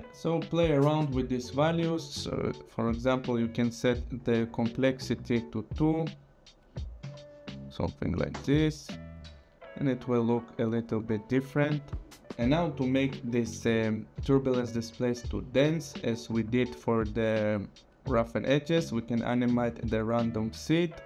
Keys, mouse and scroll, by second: 3.8-5.4 scroll, 4.2 click, 4.5 click, 5.7 click, 7.0 Down, 8.3 Return, 16.5 click.